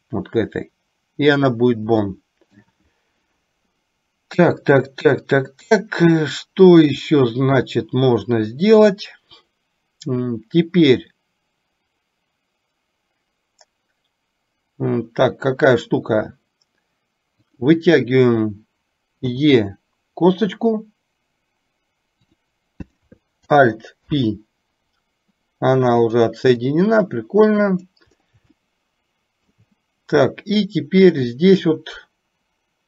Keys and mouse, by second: 2.2 shift+middle click, 19.5 e, 24.1 alt+p, 26.9-28.0 drag, 28.9-30.0 shift+middle drag.